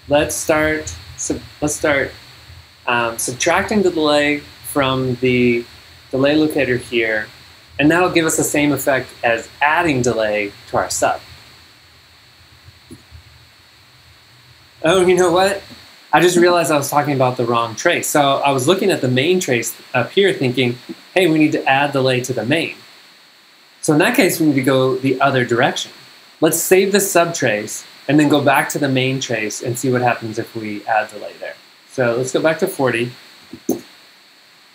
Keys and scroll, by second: 12.4-13.2 typing, 15.7 g, 33.2-34.1 typing.